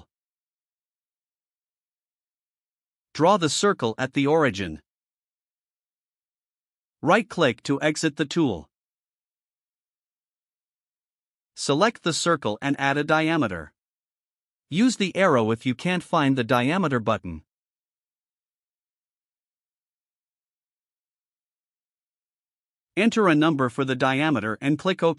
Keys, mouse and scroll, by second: 2.1 click, 4.0 click, 5.5 click, 7.9 right click, 11.2 click, 15.4 click, 21.7 click, 23.0 2, 23.6 0.